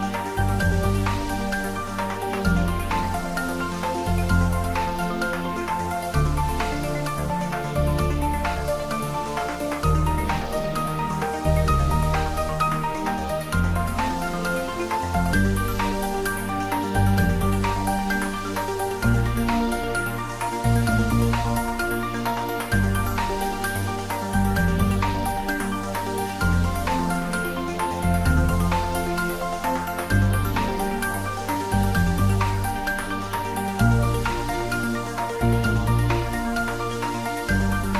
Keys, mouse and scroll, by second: 18.3 click, 19.1-21.2 right drag, 21.2-24.7 drag, 28.7-30.6 scroll up 1, 36.8 click.